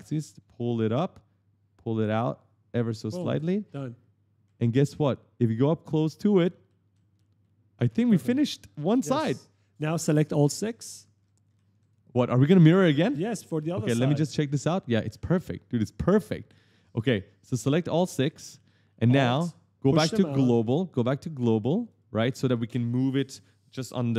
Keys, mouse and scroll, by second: 1.8 click, 3.0-7.0 typing, 3.2 right click, 10.0 scroll up 1, 10.1-13.8 typing, 12.5 right click, 13.9-14.2 scroll down 1, 15.6-15.9 scroll up 1, 15.7-17.0 typing, 17.7 shift+click, 18.3 right click, 21.5 click.